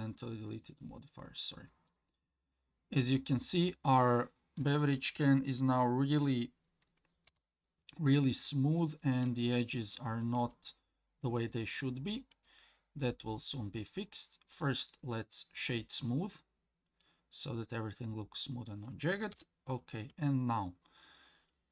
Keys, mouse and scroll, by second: 0.5 middle click, 1.9 click, 2.5-4.6 middle drag, 7.3 KP_1, 8.3-9.2 scroll up 2, 9.4-9.9 shift+middle drag, 10.4 Tab, 12.3 Tab, 14.8-17.0 right drag, 17.0-18.7 middle drag, 19.3 KP_1, 20.1 Tab.